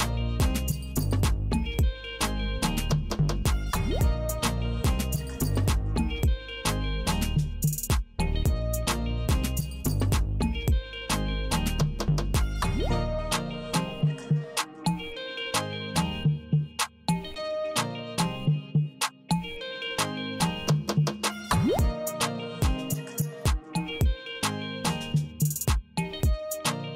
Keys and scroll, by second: 0.5 p, 2.5 alt+e, 4.5 n, 6.3 k, 10.7 Return, 12.7 Tab, 14.7 alt+e, 16.2 n, 17.6 d.